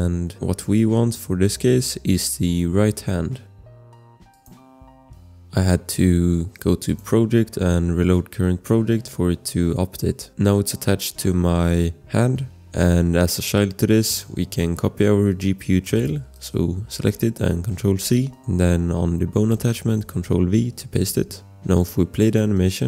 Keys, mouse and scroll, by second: 3.7 scroll, 4.2 click, 6.9 click, 9.1 click, 9.4 click, 10.1 click, 10.3 scroll, 14.1 click, 14.1 scroll, 17.4 ctrl+c, 19.9 v.